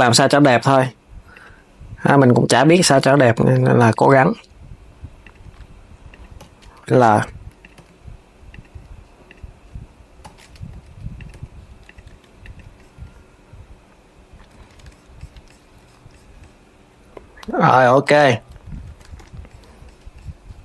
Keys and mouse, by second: 1.8 click, 2.4 l, 5.8 click, 6.1 l, 8.9 click, 9.9 l, 11.8 Tab, 12.1 click, 14.2 s, 18.3 s, 18.9 KP_3.